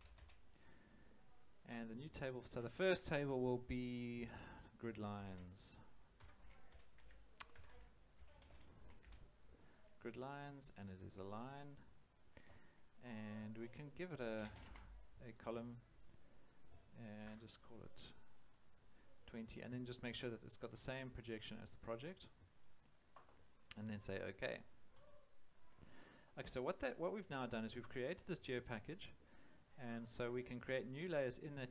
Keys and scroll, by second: 0.0-0.6 typing, 4.9-9.5 typing, 14.1-15.1 typing, 17.2 2, 18.3 0.